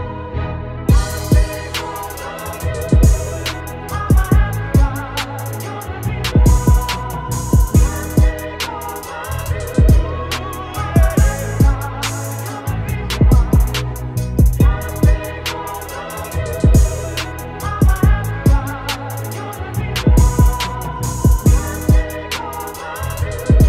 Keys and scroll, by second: 0.5 ctrl+=, 0.9 z, 1.2 space, 2.7 ctrl+shift+z, 4.4 shift+space, 5.5 ctrl+-, 5.6 ctrl+-, 11.7 ], 18.3 ctrl+z.